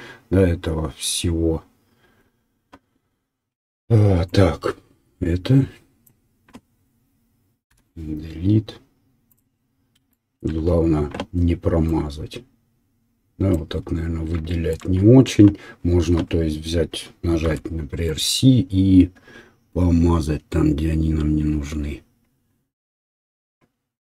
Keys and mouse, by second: 4.4-9.4 drag, 7.7 Delete, 9.4 right click, 9.8-21.2 shift+drag, 17.4 c, 21.2-24.1 right drag.